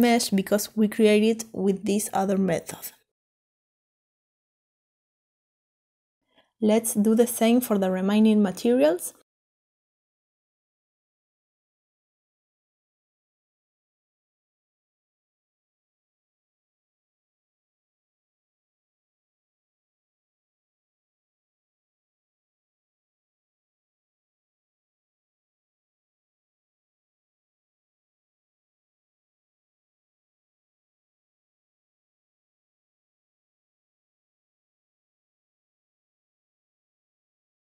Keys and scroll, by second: 11.3-11.8 typing, 25.0-28.9 typing, 30.7 Return.